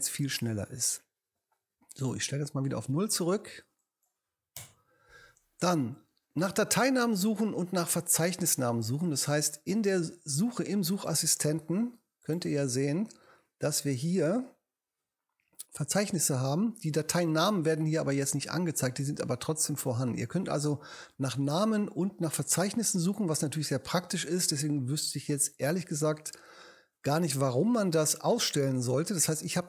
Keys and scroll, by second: 4.6 0.